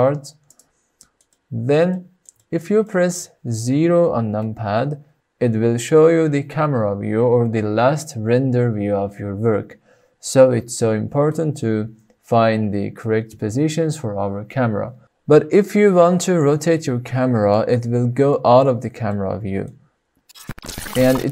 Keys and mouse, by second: 0.4 click, 0.9 middle click, 1.3-1.7 middle drag, 1.9-2.2 shift+middle drag, 2.3 middle drag, 2.8 shift+middle click, 4.4 KP_0, 16.8-17.5 middle drag, 18.2-18.6 shift+middle drag, 19.0-19.7 middle drag.